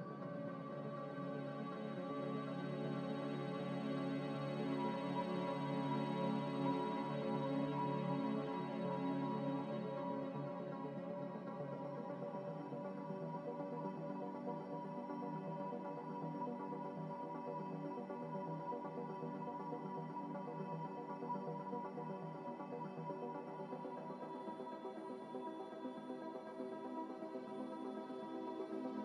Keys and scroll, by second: 0.9 m, 17.9 b, 22.1-23.3 typing, 23.7 Delete, 24.7 a.